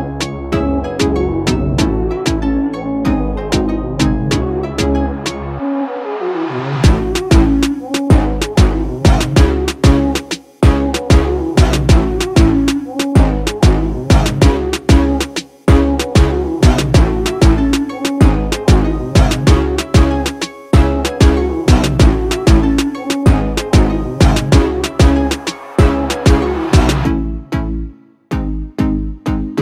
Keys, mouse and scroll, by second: 10.9 right click, 11.6-15.8 drag, 18.8 alt+scroll up 1, 19.9 alt+scroll down 1, 21.2 right click, 22.5 click, 23.4-24.8 alt+right drag, 25.2-25.9 drag.